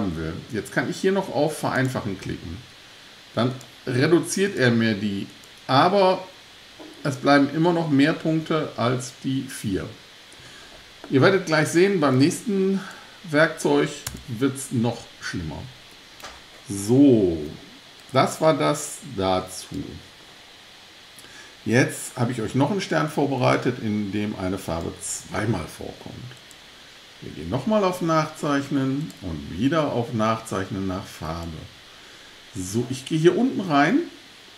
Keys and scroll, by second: 14.1 BackSpace.